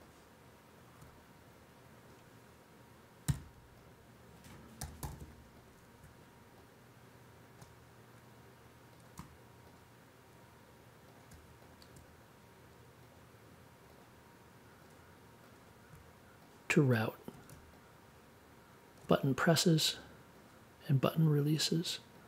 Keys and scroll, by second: 3.2 r, 4.7 n.